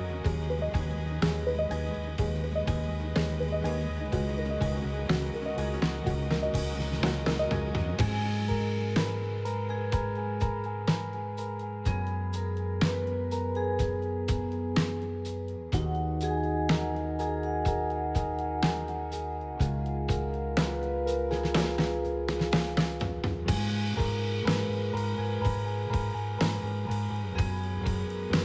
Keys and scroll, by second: 13.3 Delete, 19.4 j, 22.9 j, 25.4 j, 27.3 j.